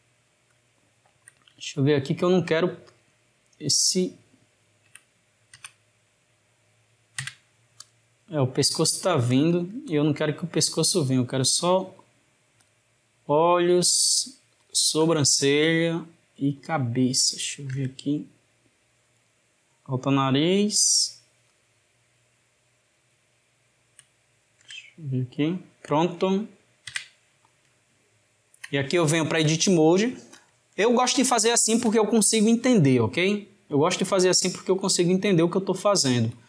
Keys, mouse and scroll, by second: 0.8-2.9 shift+middle drag, 2.9 shift+click, 3.8 shift+click, 5.6 Tab, 7.9 click, 8.8-9.3 shift+middle drag, 9.3 drag, 10.0 shift+click, 10.7 shift+click, 12.0 shift+click, 12.7 shift+click, 13.7 shift+click, 15.7 shift+drag, 16.6 shift+drag, 17.8 g, 20.6 shift+click, 21.4 shift+click, 23.1 shift+click, 24.6 g, 26.9 Tab, 28.2-34.3 ctrl+middle drag, 35.3-36.4 ctrl+middle drag.